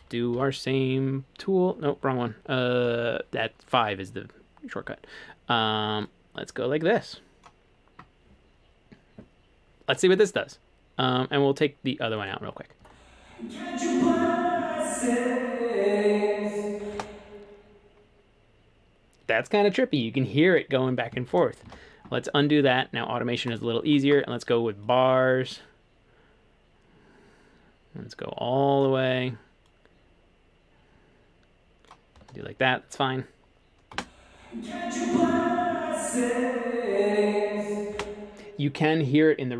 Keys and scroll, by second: 0.4 7, 2.9 5, 21.7 super+z, 38.0 space.